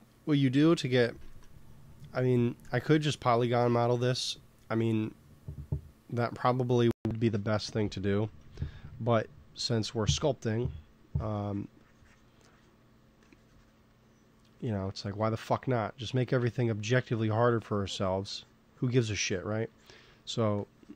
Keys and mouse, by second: 1.1 ctrl+s, 4.3 middle click, 7.2 n, 8.0 middle click, 8.7 t, 10.1 t, 10.4 f, 11.1-15.0 drag, 16.6 f, 17.2-20.9 drag.